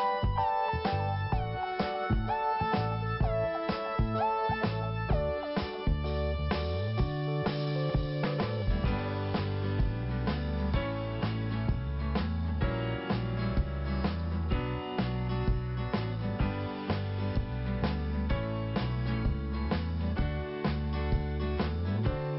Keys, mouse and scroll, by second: 2.4 click, 2.5 click, 2.8 m, 4.3 click, 4.4 click, 4.6 click, 5.4 scroll up 1, 6.5 scroll down 1, 7.2 scroll up 2, 8.4 click, 9.7 scroll down 1, 12.1 click, 14.8 p, 15.9 click, 16.0 click, 16.6 scroll down 1, 18.0 click, 19.1 scroll down 2, 20.0 scroll up 2, 21.6 click, 21.7 click.